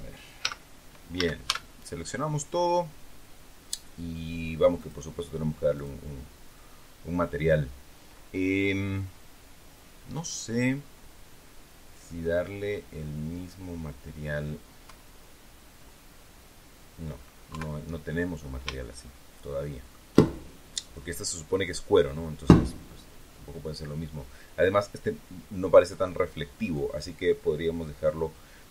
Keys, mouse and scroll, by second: 0.3 z, 1.1 a, 4.7 click, 5.7 click, 9.1-9.7 scroll down 1, 10.7-11.1 scroll up 1, 11.8-12.1 scroll down 2, 12.9-14.5 middle drag, 14.7 KP_1, 17.4 KP_3, 18.7-20.0 shift+middle drag.